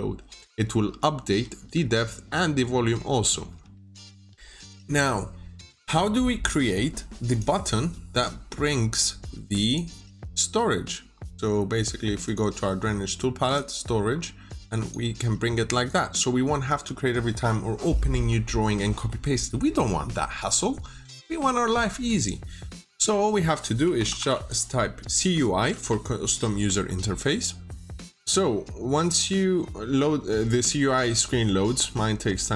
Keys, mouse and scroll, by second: 0.9-1.7 typing, 2.2 scroll down 1, 2.6-3.0 scroll up 1, 3.0 middle click, 7.2 click, 10.0 scroll down 1, 10.3 middle click, 12.1 click, 14.0-14.7 scroll up 1, 14.7 click, 16.6 Escape, 23.5-26.1 typing, 28.0 click.